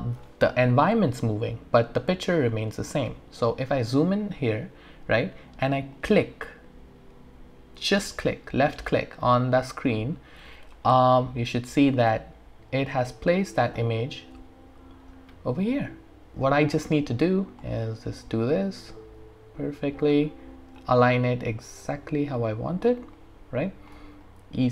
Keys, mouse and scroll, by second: 0.1-0.5 scroll down 1, 0.5-1.2 scroll up 1, 2.0 scroll down 1, 2.7 scroll up 1, 3.9-5.7 scroll down 1, 5.9 scroll, 6.0-12.1 drag, 12.1-14.0 alt+drag, 14.0-16.8 alt+middle drag, 17.1 alt+right click, 17.9-20.2 alt+middle drag, 20.3 alt+right click, 21.0-23.1 alt+middle drag, 23.2 alt+click, 24.2-24.7 alt+middle drag.